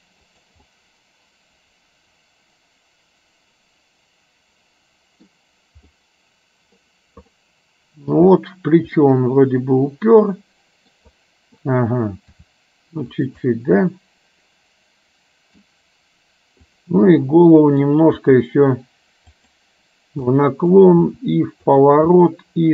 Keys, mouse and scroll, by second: 1.0-5.4 middle drag, 6.2 middle click, 7.5-8.1 scroll up 1, 8.1-9.0 scroll down 1, 9.0 scroll down 1, 9.1-10.9 middle drag, 12.4 r, 13.6-15.7 middle drag, 16.7 click, 17.2 middle click, 18.2 r, 20.4 middle click, 21.2 r, 22.2 middle click.